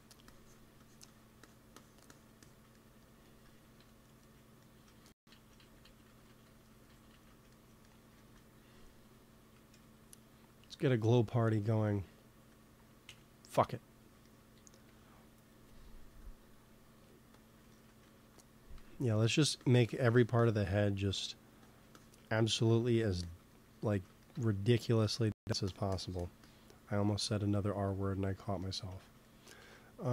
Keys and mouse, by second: 2.6 click, 2.9-4.2 drag, 3.7 KP_1, 5.1 ctrl+z, 5.4 ctrl+z, 5.7 ctrl+z, 5.9 ctrl+z, 6.1 ctrl+z, 6.3 ctrl+z, 6.5 ctrl+z, 6.7 ctrl+z, 7.0 ctrl+z, 7.2 ctrl+z, 8.0 ctrl+s, 9.6 n, 10.6-11.7 drag, 13.0 n, 14.7 t, 16.1-18.5 drag, 17.6 middle click, 17.8 right click, 18.7 f, 19.1-20.3 drag, 22.7-27.9 drag, 29.5 ctrl+s.